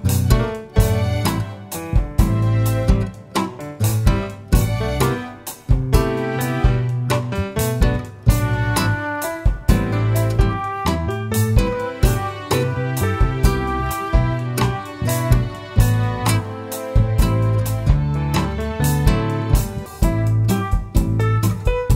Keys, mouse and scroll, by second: 1.3 click, 2.6-5.6 drag, 3.8 KP_0, 4.0 KP_Enter, 6.4-10.5 drag, 7.7 KP_0, 7.9 KP_Enter, 11.8-15.0 drag, 15.5 scroll up 1, 16.9-18.3 middle drag, 18.0-18.3 scroll down 2, 18.9-19.2 drag, 21.0 click, 21.7 click.